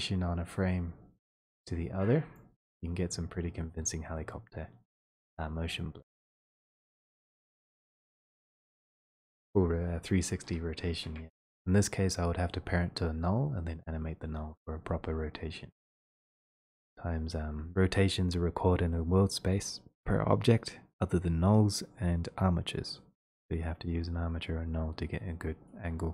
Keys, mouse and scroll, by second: 2.9 click.